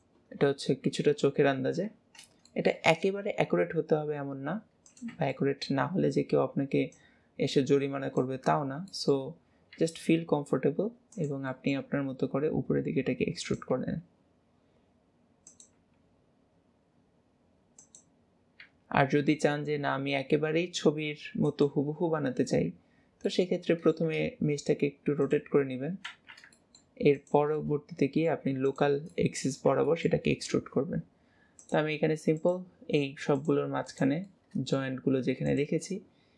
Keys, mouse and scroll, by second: 2.6 shift+middle click, 5.4 shift+middle click, 5.6-7.2 shift+drag, 8.9 shift+middle click, 11.6 middle click, 11.9 e, 23.3 middle click, 25.2 click, 26.6 middle click, 27.2 click, 27.6-28.7 middle drag, 28.7 shift+click, 29.2 middle click, 29.3-31.7 middle drag, 31.7-33.5 drag, 33.9 click, 34.3-35.5 middle drag, 35.5 shift+click.